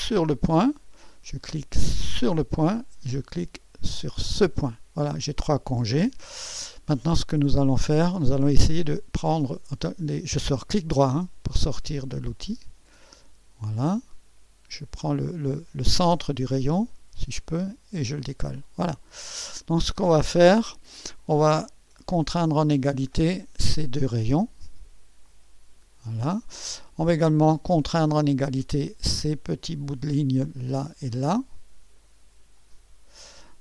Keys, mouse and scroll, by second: 0.0 click, 2.1 click, 4.2 click, 5.5-7.1 scroll up 2, 7.1-8.5 drag, 10.6 click, 11.2 right click, 12.3-14.4 drag, 15.4-19.2 drag, 21.9 click, 23.7 click, 25.2 click, 27.9 click, 28.6 click, 28.8 click, 30.6 click, 32.6 click.